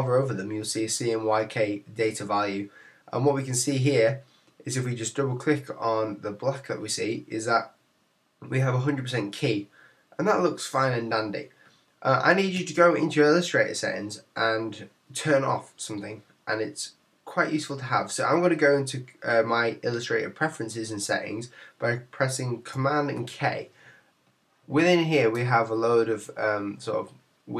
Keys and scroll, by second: 23.1 super+k.